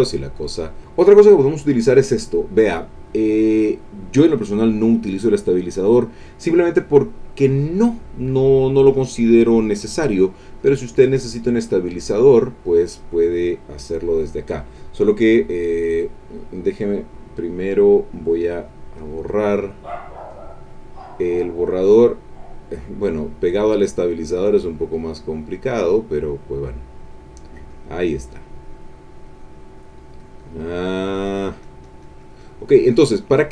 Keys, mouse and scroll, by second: 1.6 click, 7.6 click, 10.6 click, 11.5 click, 19.0 click, 20.1-21.3 drag, 21.8-23.7 drag, 24.1 click, 25.4-26.5 drag, 26.7 click, 27.4-33.5 drag.